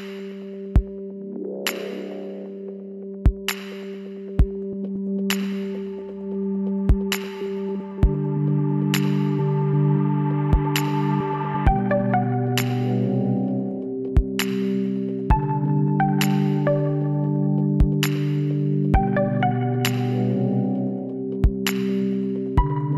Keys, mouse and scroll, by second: 0.3-1.6 right drag, 1.6 middle click, 1.9 click, 2.2-3.7 middle drag, 3.7 KP_1, 4.9 e, 7.9 l, 8.4-10.6 middle drag, 10.6-12.3 drag, 12.9-14.6 middle drag, 14.6 Tab, 18.2 middle click, 18.8-22.9 middle drag, 22.2 Tab.